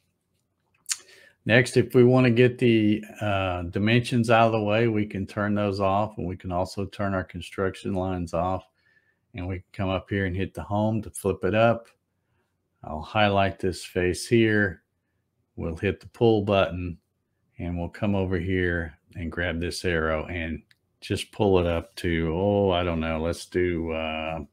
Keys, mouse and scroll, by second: 4.8 click, 7.2 click, 9.7 click, 13.6 click, 16.2 click, 19.4-23.4 drag, 23.2 space.